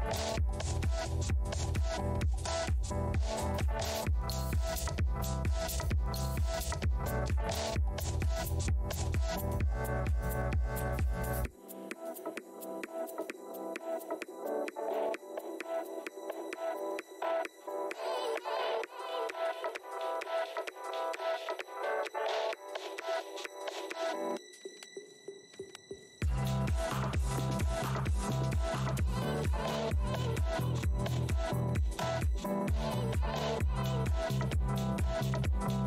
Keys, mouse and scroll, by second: 2.0-2.3 scroll down 1, 2.5 right click, 5.4 scroll up 1, 5.5 w, 6.3 r, 7.7 alt+scroll down 1, 8.6 shift+w, 8.8 shift+x, 10.1 r, 13.4 alt+click, 14.2-15.7 typing, 19.1 shift+v, 20.1 scroll up 1, 22.7 r, 26.8 click, 31.0 f, 31.6 right click, 31.9 click, 32.1 shift+right click, 32.4-33.1 scroll down 1, 32.4 r, 33.2 click.